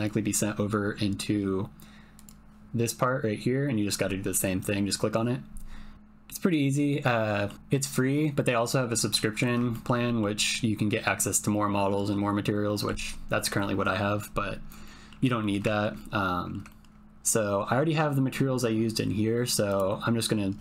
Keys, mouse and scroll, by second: 2.1 click, 5.9 click, 7.2 middle click, 9.2 middle click, 9.7 shift+click, 10.0 middle click, 12.7 middle click, 14.9 middle click, 15.7 ctrl+middle click, 16.1 middle click, 16.8-19.7 ctrl+middle drag, 19.7-20.6 drag.